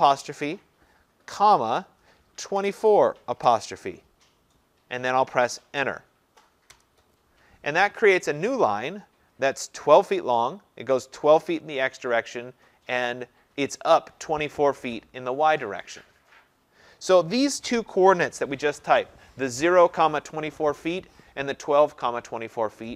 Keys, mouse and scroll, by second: 1.3 ,, 2.3-3.5 typing, 6.7 Return, 8.4-11.9 middle drag, 8.4-9.0 scroll.